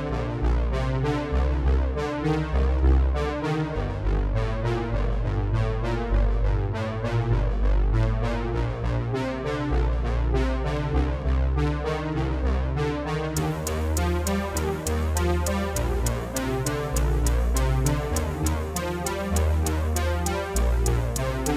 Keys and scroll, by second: 1.8 ctrl+z, 3.2 ctrl+BackSpace, 19.6 ctrl+z.